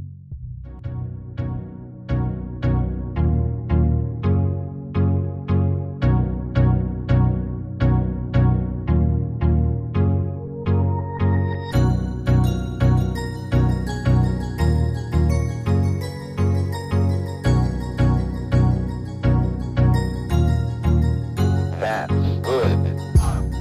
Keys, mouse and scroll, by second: 0.1 ctrl+scroll down 1.